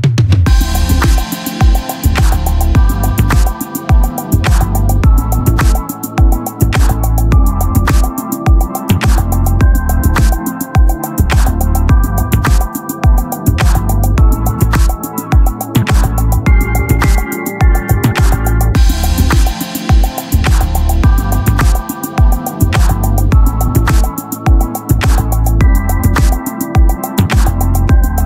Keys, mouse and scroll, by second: 0.6-2.5 drag, 3.0 middle click, 3.7 Tab, 4.0 a, 4.2 a, 6.0 e, 7.7-8.7 middle drag, 9.4-10.3 scroll up 1, 10.3-11.6 drag, 10.8 ctrl+Tab, 11.8-13.1 right drag, 12.7-13.9 drag, 13.2 ctrl+Tab, 14.1 right click, 14.3 KP_1, 14.6 z, 15.6 b, 16.7 x, 17.7 Tab, 18.4 z, 20.1 click, 20.3 click, 20.5 click, 25.4-27.9 right drag.